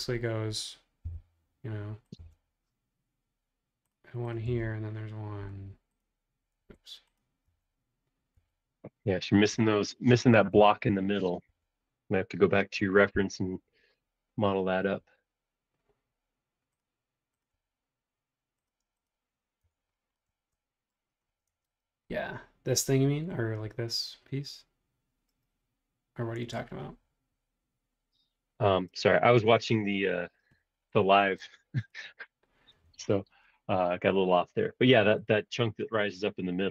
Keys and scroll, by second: 1.0 m, 6.7 Escape, 9.6 space, 10.5 BackSpace, 13.2 m, 18.9 space, 19.6 BackSpace, 21.5 super+Tab, 29.9 super+Tab.